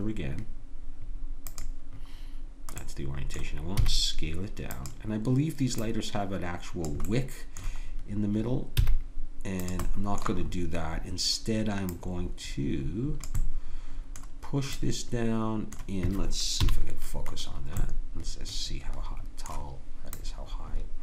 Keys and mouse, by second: 3.8 s, 8.8 s, 11.9-13.8 drag, 13.9-16.6 middle drag, 16.6 KP_Decimal, 17.5 middle click, 18.1-19.8 middle drag, 20.2-21.0 drag.